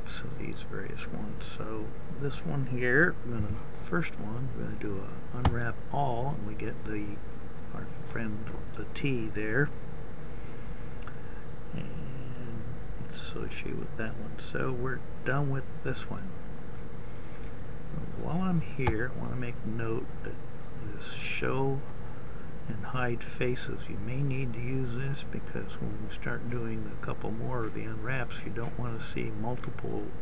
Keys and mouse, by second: 2.8 u.